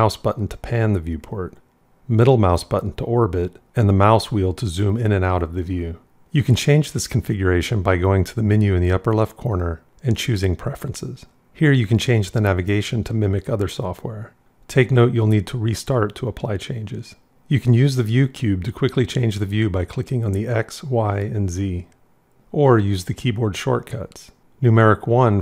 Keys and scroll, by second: 3.6 scroll, 24.4 KP_1.